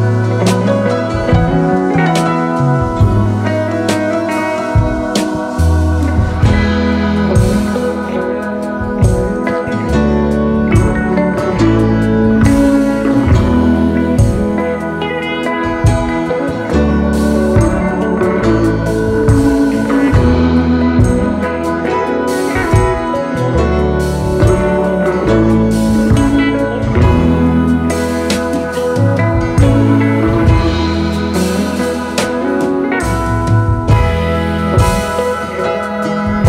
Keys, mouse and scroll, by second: 0.5 ctrl+c, 0.6 ctrl+f, 2.6 ctrl+f, 2.6 alt+shift+click, 8.7 space, 8.8 double click, 9.7 typing, 12.6 alt+scroll up 1, 14.6 right click, 17.2 typing, 26.8-27.5 typing, 30.2 Delete, 30.9 alt+scroll down 1, 31.1 space, 33.9 alt+scroll down 1, 34.1 space, 36.2 alt+scroll up 3.